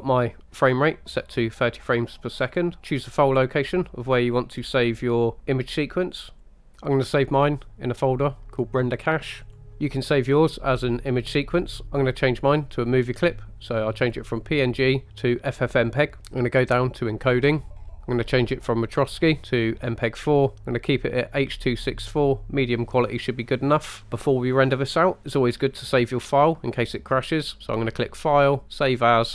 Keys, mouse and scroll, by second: 2.4-6.4 scroll down 3, 6.4 click, 11.3 click, 11.8 click, 14.0-16.2 drag, 16.2-17.3 scroll down 6, 17.3 click, 17.8-19.0 scroll down 3, 19.0-20.1 drag, 23.9-25.6 scroll up 2, 28.1-29.3 drag.